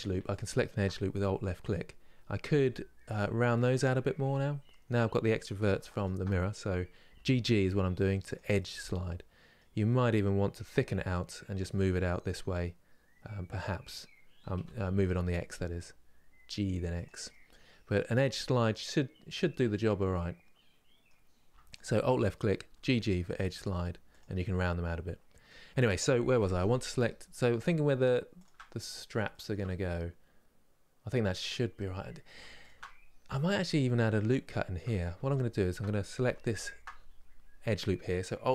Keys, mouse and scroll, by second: 0.0 alt+click, 2.1 g, 3.5-5.5 middle drag, 5.6 alt+click, 6.8 g, 8.2-10.3 middle drag, 10.3 g, 17.0-20.0 middle drag, 21.4 alt+Left, 22.4 g, 24.1-26.0 middle drag, 26.0 3, 26.6 alt+Left, 28.1 alt+shift+Left, 28.5 scroll down 2, 29.0-32.3 shift+middle drag, 32.3 alt+shift+click, 33.2 scroll up 2, 34.2 shift+middle click, 35.0 alt+click, 35.9 2, 36.3 alt+click.